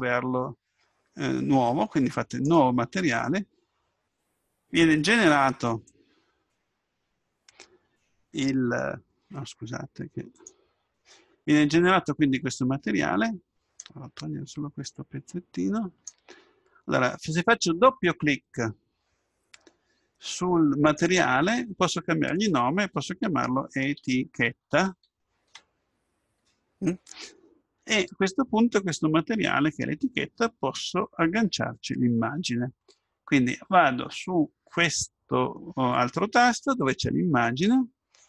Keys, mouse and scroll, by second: 2.3-4.2 drag, 20.9-23.1 drag, 24.8 t, 37.5-38.2 drag.